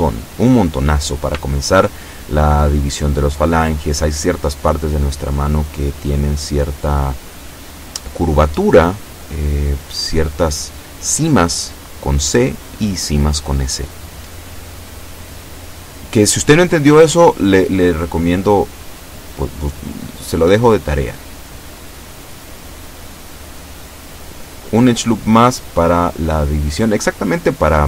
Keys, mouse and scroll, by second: 5.4 shift+middle click, 6.5-8.0 shift+middle drag, 9.5 shift+middle click, 12.5-12.9 scroll up 2, 13.3 shift+middle click, 16.1 ctrl+r, 16.8 click, 17.9 click, 19.0 right click, 19.6-20.6 drag, 21.5 ctrl+z, 22.3 b, 22.6 click, 24.0-25.1 drag, 26.1 a, 26.4 b, 26.9 click.